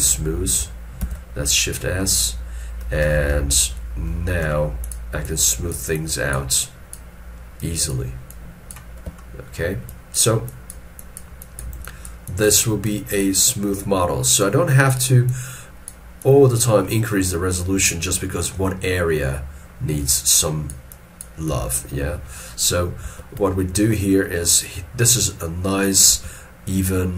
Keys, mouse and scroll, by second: 1.0 shift+s, 3.1 alt+e, 5.3 double click, 9.2 shift+middle click, 11.0 double click, 17.0 scroll down 1, 21.7 middle click, 22.4 middle click, 23.6 shift+middle click, 26.2 alt+e.